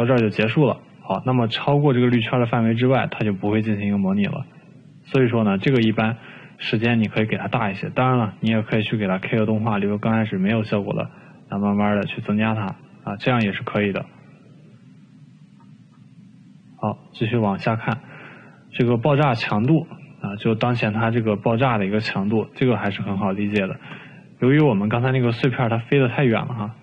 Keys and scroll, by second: 6.8 ctrl+z.